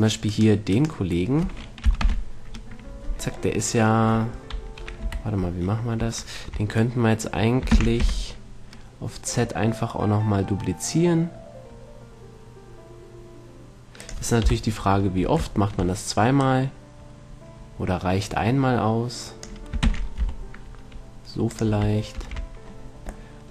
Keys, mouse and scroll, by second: 2.3 ctrl+l, 5.3 KP_3, 8.0 shift+d, 14.5-16.1 drag, 14.7 KP_3, 16.7-18.4 drag, 20.1 shift+d, 21.9-23.5 drag, 22.4 shift+s.